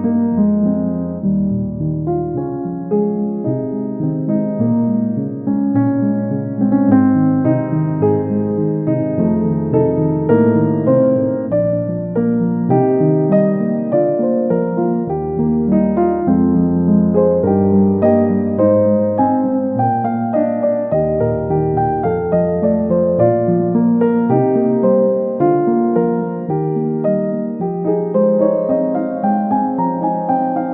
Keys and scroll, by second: 0.1 Left, 23.6 ctrl+z.